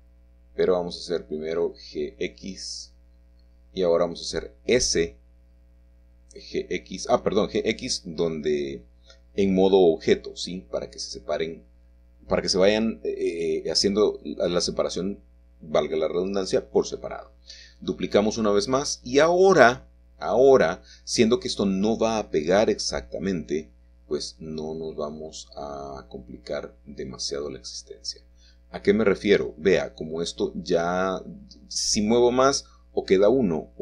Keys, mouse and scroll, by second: 0.0 g, 3.8 click, 4.3 Tab, 5.9 g, 9.5 click, 12.7 Escape, 18.0 shift+click, 22.9 g, 27.6 shift+middle click, 28.7 middle click, 31.4-33.8 shift+middle drag.